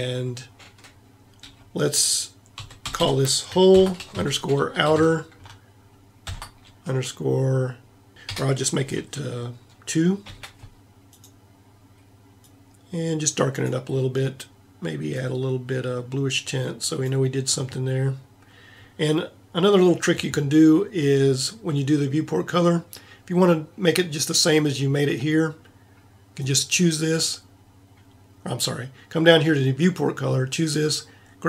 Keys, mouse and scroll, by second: 3.0 l, 11.1-17.6 middle drag, 26.3-31.4 middle drag.